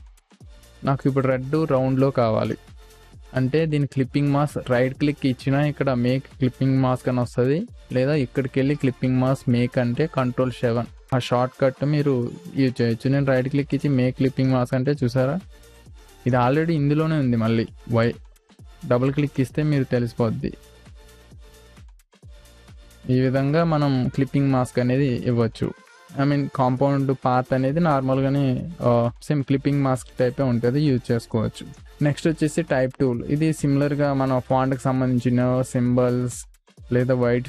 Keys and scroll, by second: 1.2 ctrl+space, 5.2 ctrl+space, 15.1 space, 25.4 ctrl+z.